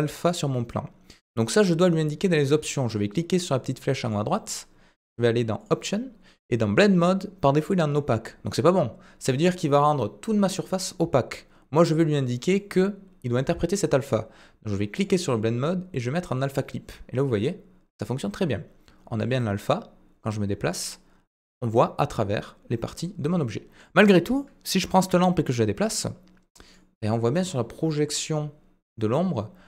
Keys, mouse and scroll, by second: 4.0 click, 12.6 middle click, 14.9-16.4 drag, 19.4-23.9 middle drag.